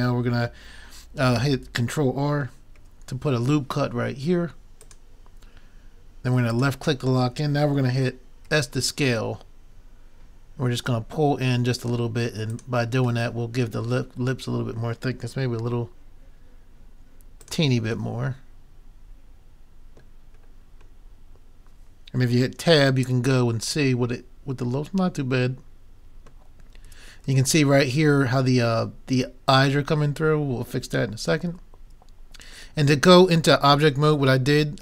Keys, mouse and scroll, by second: 2.8 ctrl+r, 8.5 s, 13.3-15.2 middle drag, 15.6 s, 17.5-19.4 drag, 18.1-19.5 middle drag, 23.1 Tab, 24.1 middle click, 26.9 Tab, 27.3 Tab.